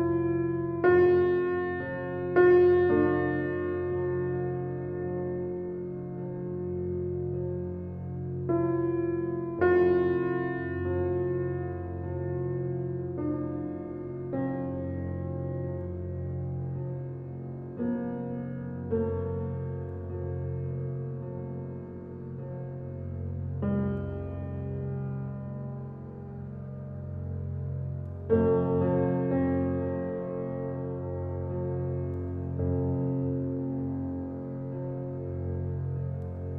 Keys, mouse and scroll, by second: 1.2-2.8 middle drag, 2.8 scroll up 1, 2.9-4.3 middle drag, 4.3 shift+click, 4.9 click, 5.6 shift+d, 8.0 shift+d, 9.4 scroll down 2, 9.9-11.5 middle drag, 11.5-13.3 drag, 14.6 g, 16.4 click, 16.8 g, 18.6-19.5 drag, 19.5 g, 21.8 click, 22.3 scroll down 2, 22.7-23.9 middle drag, 23.9 click, 24.5 g, 26.3 click, 26.9 g, 28.5 click, 29.0-29.9 middle drag, 29.9 drag, 30.4 scroll down 3, 30.8 click, 31.6-32.3 scroll up 3, 32.3-36.1 shift+middle drag, 36.1 click.